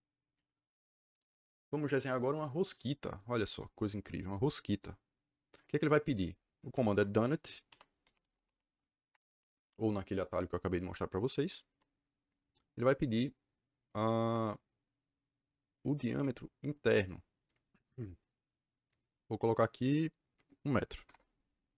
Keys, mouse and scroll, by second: 1.1 click, 6.7 Escape, 6.8 Escape, 7.3-8.6 typing, 9.0 Return, 20.9 KP_1, 21.0 KP_Enter.